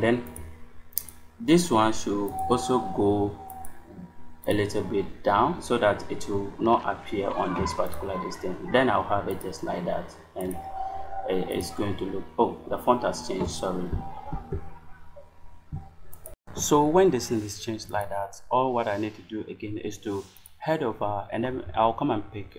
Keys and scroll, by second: 14.2 ctrl+z, 18.3 space.